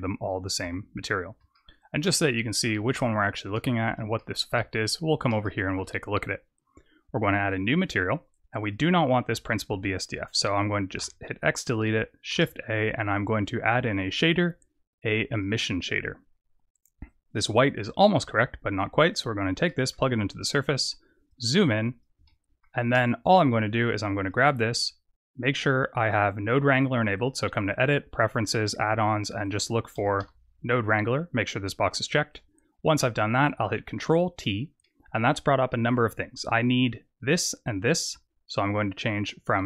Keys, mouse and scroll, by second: 0.6 n, 1.5 shift+middle click, 2.2 middle click, 2.9 shift+middle click, 3.7-4.1 scroll up 4, 4.1 shift+middle click, 4.6-5.4 scroll up 4, 5.4 shift+middle click, 7.4 click, 8.6 click, 10.9 x, 12.2 shift+a, 17.8 click, 19.6 middle click, 20.0-21.2 scroll up 8, 21.2 click, 22.2 shift+middle click, 23.7 click, 27.0 click, 32.7 click, 33.5 ctrl+t, 34.3-35.5 scroll down 5, 34.7 middle click.